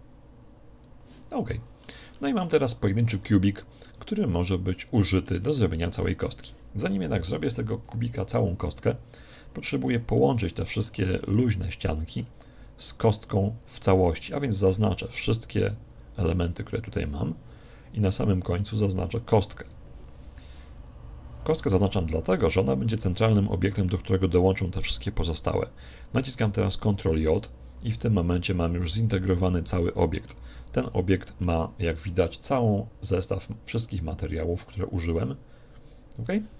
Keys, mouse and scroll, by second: 1.5-5.5 middle drag, 5.6-7.3 middle drag, 7.0 KP_1, 8.9-10.1 scroll down 1, 10.1-14.1 middle drag, 14.1 b, 16.9-18.7 middle drag, 19.6 right click, 27.8 Tab, 28.7 a, 29.4-32.5 middle drag, 30.3 z, 32.7 click.